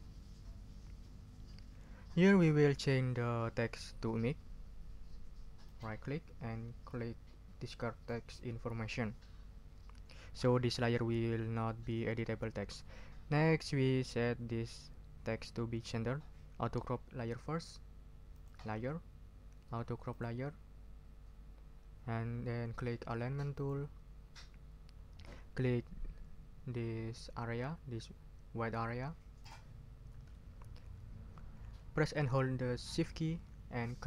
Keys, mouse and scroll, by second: 5.6 right click, 8.0 click, 18.3 click, 20.1 click, 23.5 click, 29.4 click.